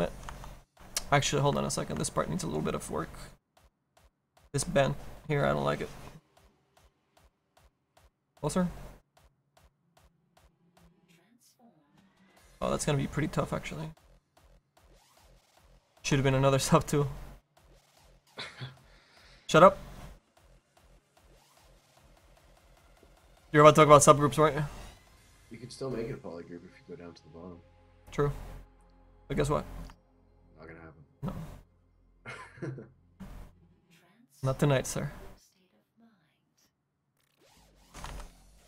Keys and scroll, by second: 38.4 ctrl+z.